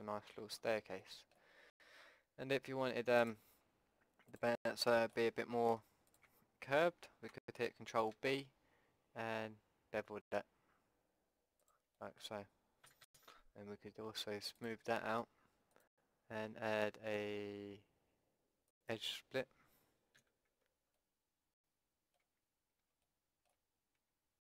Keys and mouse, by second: 3.2-8.1 drag, 8.1 ctrl+b, 11.9 middle click, 12.9 a, 13.1 a, 14.6-17.8 drag, 17.8-20.6 middle drag, 20.2 a, 20.6 Tab, 21.0-23.0 middle drag, 22.2 Tab, 23.0 click, 24.0 Tab.